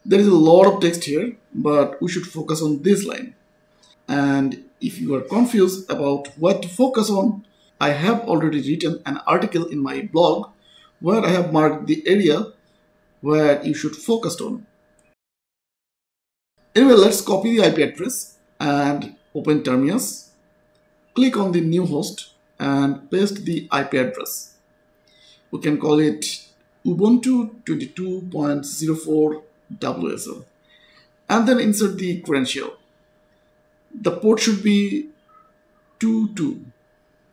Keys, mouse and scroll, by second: 0.5 click, 2.7 click, 7.7 click, 10.6-11.4 scroll up 1, 11.5-12.8 scroll down 1, 13.0-13.8 scroll up 1, 13.8 click, 16.5 click, 19.4 click, 22.0 click, 23.9 ctrl+v, 25.3-27.5 typing, 28.8-32.6 typing, 30.7 click, 32.0 click, 33.0-33.5 scroll down 1, 34.2 click, 34.6 2, 35.4-37.3 scroll up 1.